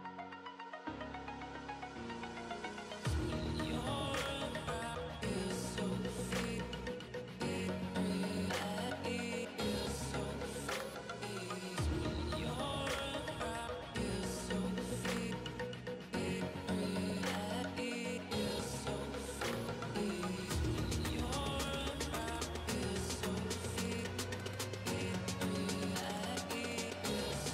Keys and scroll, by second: 6.3 ctrl+z, 7.5 ctrl+z, 8.8 ctrl+z, 9.0-10.6 typing, 12.3 ], 12.3 ], 12.8 ], 16.8 ctrl+z, 18.8 ctrl+z, 20.0 typing, 25.5 ].